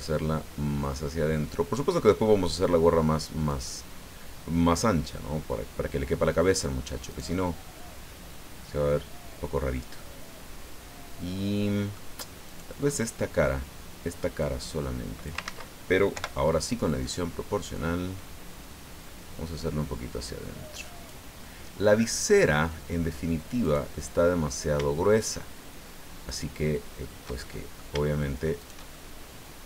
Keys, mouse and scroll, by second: 3.5 click, 4.8 middle click, 7.1 right click, 9.7-12.1 middle drag, 12.4 right click, 12.8 middle click, 12.9 click, 14.4-15.4 drag, 15.4 ctrl+z, 16.1 o, 16.9 click, 17.7-18.5 scroll up 4, 21.4-22.8 middle drag, 23.6 right click, 23.9 middle click, 26.3 shift+right click, 27.1 shift+click, 28.6 shift+right click, 28.9 shift+middle click, 29.3 click.